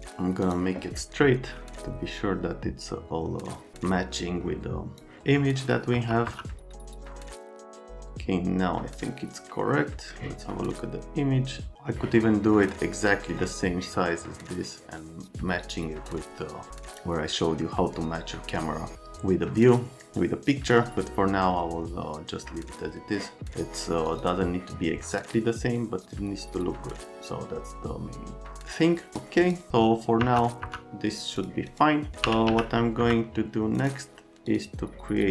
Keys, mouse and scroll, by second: 0.0 click, 0.4 click, 3.7 click, 5.9 F3, 6.3 F3, 6.9 click, 7.9 right click, 24.1 middle click, 26.1 middle click, 26.9-29.1 right drag, 29.1 click, 29.4 click, 30.2 F3, 30.6 F3, 31.4 click, 32.0-33.0 typing, 33.0 F3, 33.7 right click, 34.5 click.